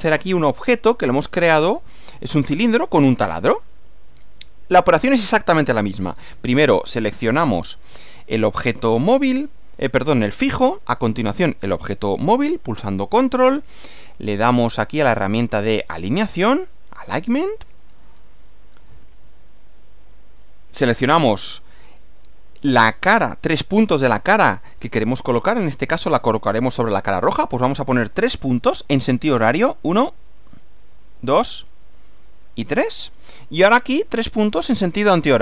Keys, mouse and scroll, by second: 1.2-1.9 middle drag, 3.4-5.4 middle drag, 8.3 click, 11.6 ctrl+click, 14.4 click, 15.1 click, 17.0 click, 19.4-20.7 middle drag, 21.1 shift+middle click, 21.9-24.9 shift+middle drag, 29.7 click, 31.2 click, 32.4 click.